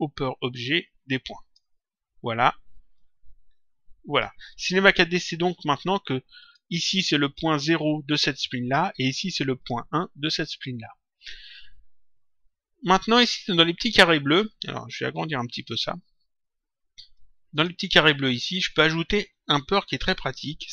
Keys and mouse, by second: 2.9 click, 6.4 click, 9.5 click, 15.0 click, 17.1 click.